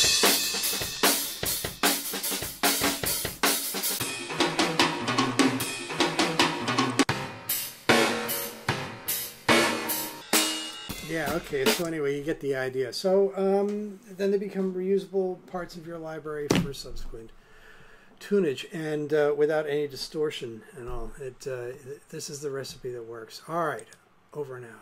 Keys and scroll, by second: 10.9 space.